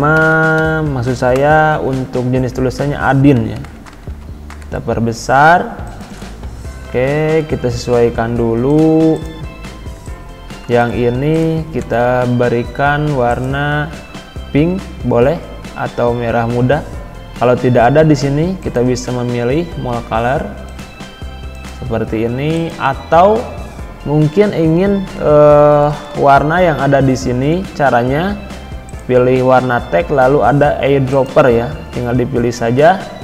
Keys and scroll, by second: 3.3 ctrl+], 25.9 ctrl+b.